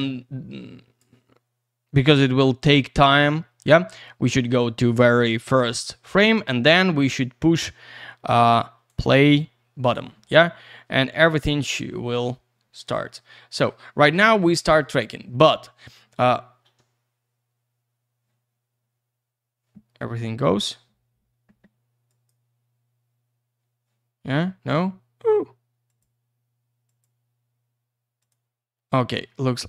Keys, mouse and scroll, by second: 4.0 click, 8.9 click, 9.0 click, 11.5-13.6 scroll down 1, 14.9-16.1 ctrl+scroll down 1, 22.1 click, 25.9 click, 26.9 click, 28.2 click.